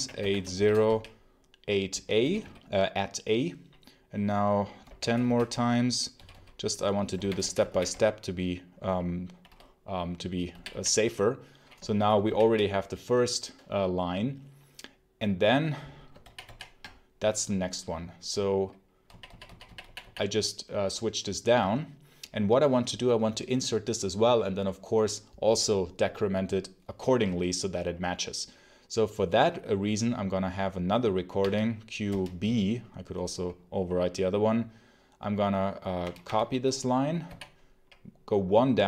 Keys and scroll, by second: 0.0-2.1 typing, 4.5-8.3 typing, 10.4 g, 11.7 shift+g, 16.1 ctrl+j, 16.3 ctrl+i, 18.9 k, 19.7 j, 20.1 ., 31.3 q, 32.0 b, 35.9 y, 36.1 y, 37.1 j.